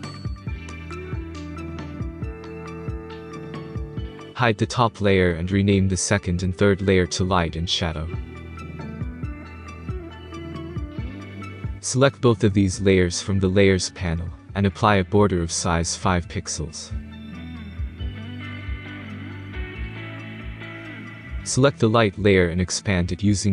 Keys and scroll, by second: 8.0-11.2 typing, 18.2 5, 19.0 Return.